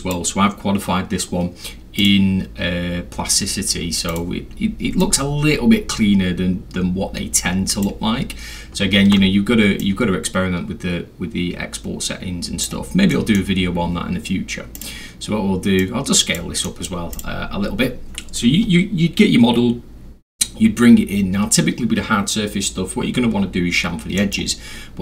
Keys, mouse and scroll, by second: 2.0 click, 4.1 click, 5.0-7.8 drag, 9.1 ctrl+z, 9.8-12.7 ctrl+drag, 13.1 middle drag, 14.8 click, 15.8 click, 16.7 middle click, 17.1 click, 21.4 middle click, 21.4 scroll, 21.5-22.6 scroll, 24.2 middle drag, 24.6 scroll down 2, 24.8 scroll.